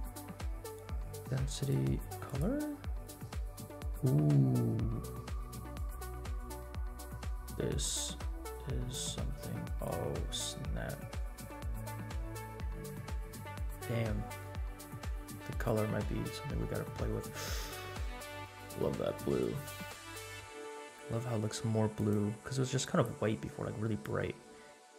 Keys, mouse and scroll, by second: 2.3 click, 21.9 click.